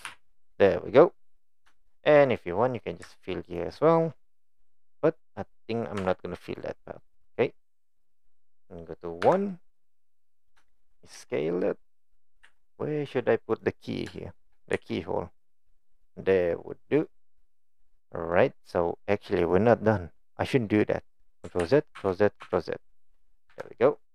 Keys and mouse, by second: 0.1 f, 0.6 click, 1.0 middle click, 1.9 shift+middle click, 4.9-5.9 middle drag, 6.0 Tab, 9.3 KP_1, 11.1 s, 12.4 g, 14.1 shift+middle drag, 14.8 s, 16.4-17.0 middle drag, 18.3-19.3 middle drag, 21.6 ctrl+z, 22.0 ctrl+z, 22.5 ctrl+z, 23.5 KP_1.